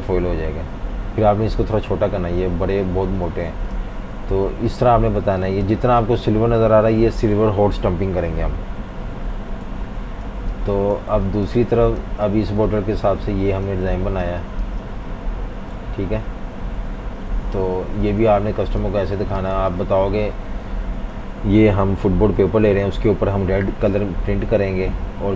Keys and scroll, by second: 3.3 super+z, 5.2 v, 5.4 space, 8.9 F19, 9.7 super+-, 9.8 super+-, 10.3-13.1 typing, 14.2 v, 14.7 space, 17.9 typing, 19.2 typing, 20.9 F18.